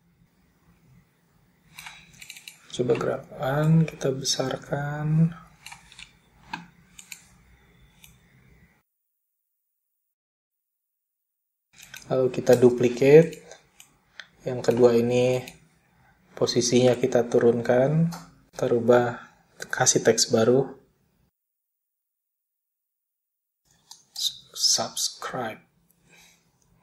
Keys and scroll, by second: 11.3 super+d, 20.9-24.7 typing.